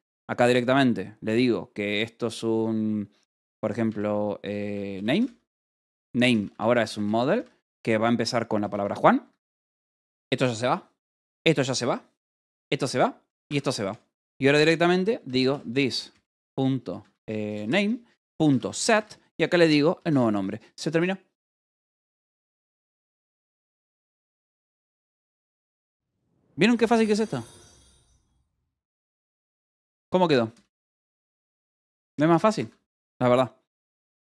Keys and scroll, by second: 0.0-0.5 typing, 3.3-7.8 typing, 9.1 Escape, 9.5 j, 9.9 d, 10.1 Escape, 11.0 d, 12.1-19.4 typing, 12.7 Escape, 20.2 Escape, 27.8 k, 28.4 j, 29.9 k, 30.9 shift+v, 31.4 Escape, 31.9 j, 32.5 Escape.